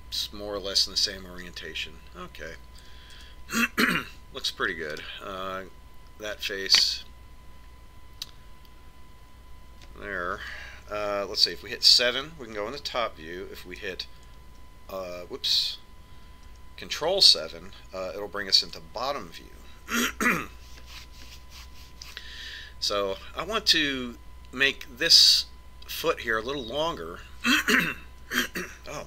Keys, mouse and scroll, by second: 4.9 a, 6.7 right click, 13.6 KP_7, 16.1 alt+KP_7, 18.1 ctrl+KP_7, 22.0-24.7 middle drag.